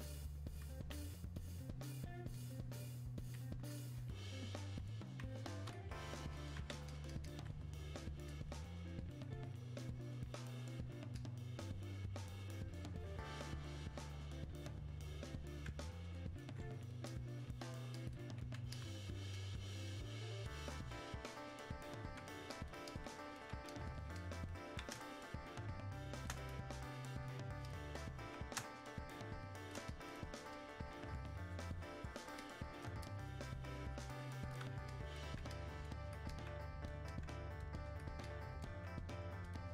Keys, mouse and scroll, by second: 5.7-25.0 ctrl+drag, 25.0 space, 25.6 click, 25.7 space, 25.9 space, 27.7 click, 28.3 Escape, 28.6 space, 29.0 click, 29.1 space, 29.9-39.5 drag.